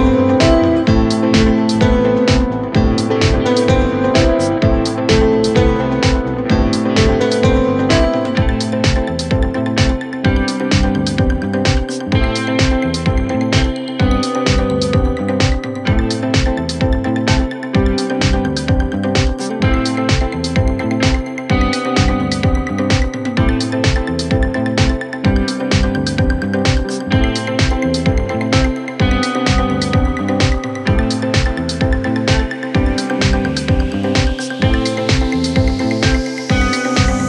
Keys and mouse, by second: 0.0-2.2 typing, 3.2 click, 3.5 g, 4.9 x, 6.3 b, 7.0 g, 8.4 g, 13.4 g, 15.5 KP_1, 15.6 KP_3, 16.2 g, 17.7 s, 18.4 g, 19.2 s, 25.1 shift+d, 29.1-37.2 drag.